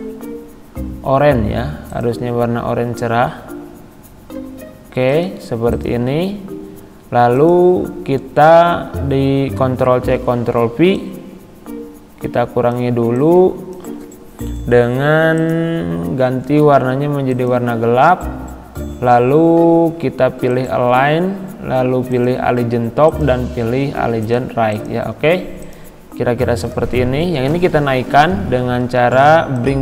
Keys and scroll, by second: 9.6 ctrl+c.